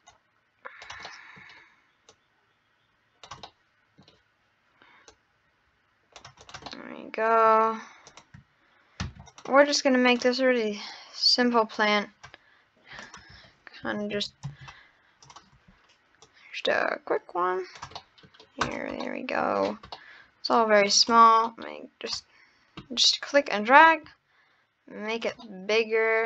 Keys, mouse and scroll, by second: 0.1 click, 1.1-2.1 middle drag, 2.1 click, 3.4-5.1 middle drag, 5.1 click, 6.4 click, 6.7-7.6 middle drag, 8.1 click, 10.1 click, 13.0-16.3 drag, 18.0-18.4 middle drag, 18.7 scroll down 1, 18.9 scroll up 1, 19.1-19.5 middle drag, 19.6 scroll up 3, 20.0-20.9 middle drag, 21.1 drag, 25.4 middle click, 25.8 scroll down 3.